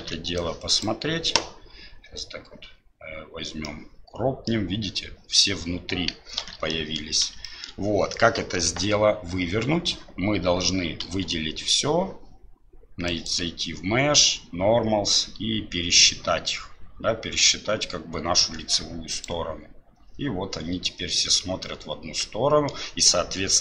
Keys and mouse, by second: 3.6 middle click, 6.4 alt+b, 6.7 middle click, 7.5 shift+middle click, 7.6 shift+click, 21.6-22.7 middle drag.